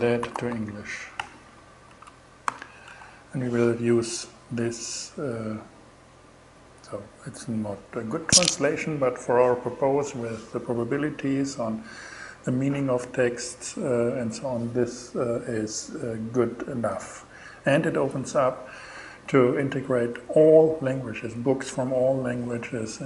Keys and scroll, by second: 0.0-0.4 typing, 0.6 Return, 1.5 alt+shift+Return, 1.9 alt+shift+6, 2.3 alt+shift+Return, 3.1 shift+Return.